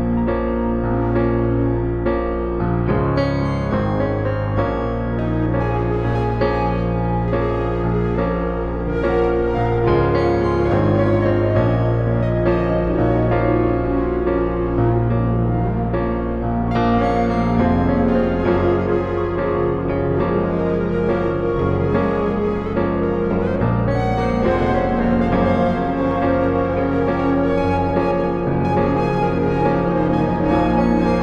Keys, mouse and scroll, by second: 0.8 middle click, 2.1-3.9 drag, 4.1 s, 5.9-7.7 drag, 8.0-9.8 drag, 16.8 click, 18.0 click, 18.0 typing, 21.6-24.9 drag, 22.5 typing, 25.1-27.5 middle drag, 27.5 Delete, 29.2-31.2 middle drag.